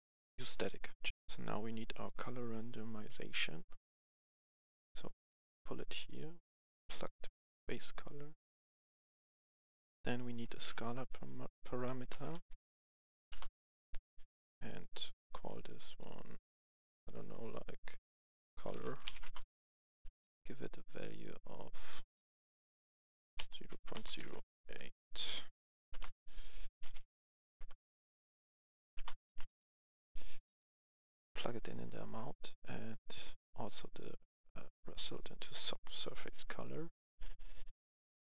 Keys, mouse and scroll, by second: 1.0 F11, 1.9-5.3 drag, 5.3 right click, 6.0 click, 9.5 F10, 10.0 right click, 10.5 right click, 11.8-12.5 typing, 13.2 Return, 14.4 click, 18.5-19.1 typing, 19.1 Return, 22.1 click, 23.6 click, 23.7-25.8 typing, 25.9 Return, 27.1 Right, 27.6-28.8 typing, 28.9 Return, 30.1 click, 31.2 right click, 33.1-35.5 drag, 35.9 right click.